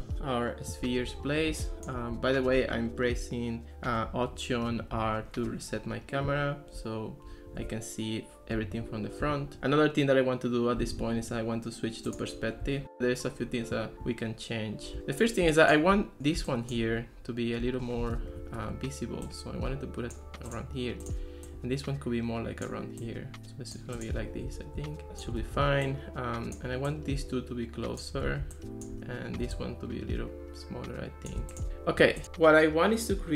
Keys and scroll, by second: 5.0 alt+r, 18.2 alt+r, 25.6 super+z, 28.3 super+z.